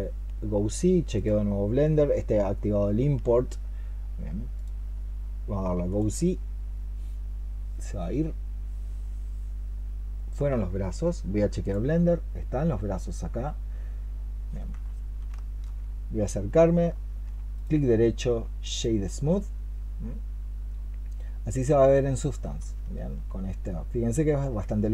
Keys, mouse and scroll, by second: 12.6 middle click, 15.2 shift+middle click, 15.8-16.8 shift+scroll up 3, 16.8 shift+middle click, 17.4 right click, 19.9 middle click, 21.5-22.5 scroll up 4, 22.5 shift+middle click, 24.5 shift+middle click.